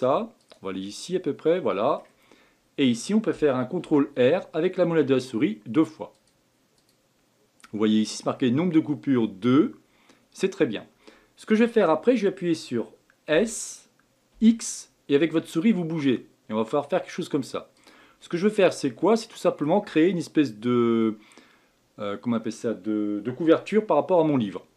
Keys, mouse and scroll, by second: 0.8-2.2 middle drag, 2.2-3.8 scroll down 2, 3.8 ctrl+r, 18.2-21.3 middle drag.